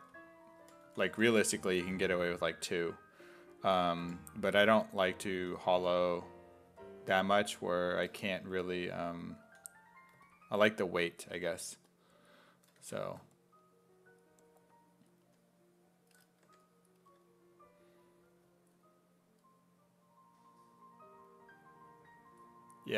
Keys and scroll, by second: 0.4-1.7 typing, 4.1 5, 5.4 s, 5.8 1, 9.5 s, 12.6-13.5 typing, 16.5 1.